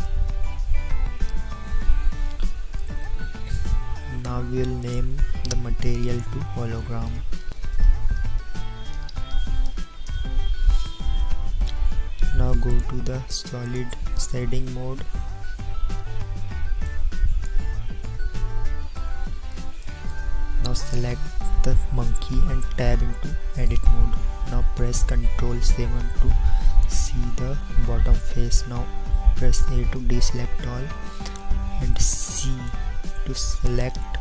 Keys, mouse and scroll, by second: 5.2-10.2 drag, 18.2-20.9 middle drag, 23.3 Tab, 27.3 ctrl+KP_7, 29.2 a, 32.8 c.